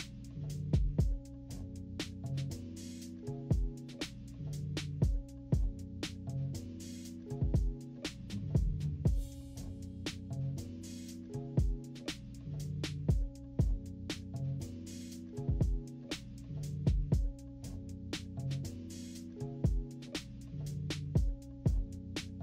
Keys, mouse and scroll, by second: 0.0 click, 0.5 -, 0.8 =, 1.1-1.4 scroll down 2, 1.4-3.0 drag, 3.1 click, 3.6 -, 4.0 =, 4.6-8.4 drag, 9.0 click, 9.8 click, 10.6 -, 11.0 =, 11.1 scroll up 2, 11.3 scroll down 2, 11.7-13.7 drag, 13.9-15.1 drag, 15.5 click, 16.5 -, 16.9 =, 17.4 click, 18.0-20.4 drag, 20.8-22.4 typing, 21.4 click.